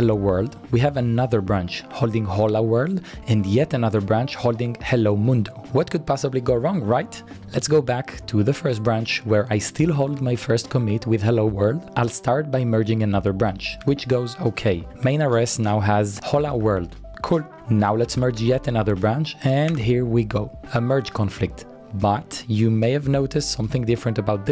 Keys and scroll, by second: 7.3 Page_Up, 7.3 Page_Down, 9.4-11.4 typing, 14.0 Return, 14.6-20.4 typing.